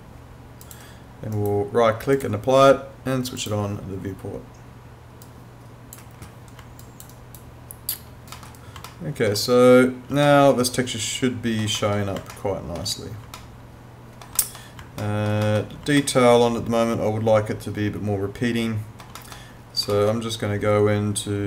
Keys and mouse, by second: 0.6 click, 1.4 right click, 2.2 click, 6.8 alt+click, 7.1 alt+right click, 8.4 middle click, 8.9 alt+middle click, 10.3 alt+middle click, 12.4 alt+middle click, 13.4 alt+middle click, 15.0 alt+middle click, 16.0 alt+middle click, 19.2 middle click, 19.9 alt+middle click.